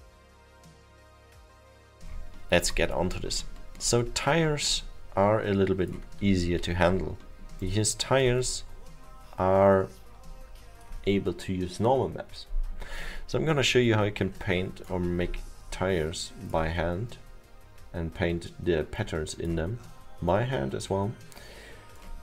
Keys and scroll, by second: 3.7 alt+7.